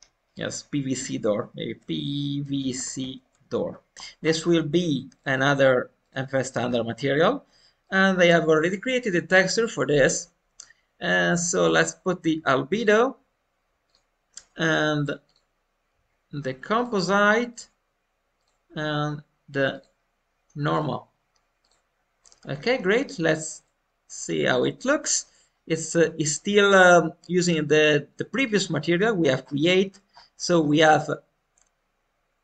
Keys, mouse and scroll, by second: 3.9 scroll down 5, 3.9 BackSpace, 3.9 o, 4.5-4.8 scroll down 3, 5.1-6.6 drag, 6.6 scroll down 2, 7.7-12.2 drag, 13.8-20.9 drag, 22.1-25.5 middle drag, 25.5-25.8 scroll up 2, 25.8-28.6 middle drag, 28.9 scroll up 2, 29.2 scroll down 1, 32.3-32.4 scroll up 4.